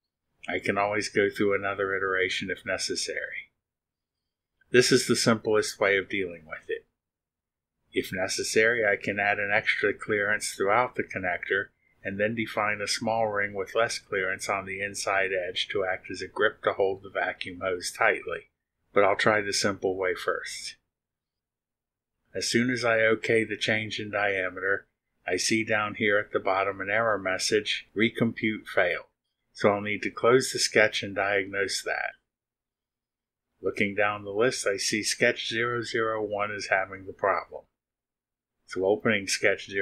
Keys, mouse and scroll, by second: 0.2 BackSpace, 2.1 9, 21.7 click, 30.1 click, 37.1 click, 39.2 space.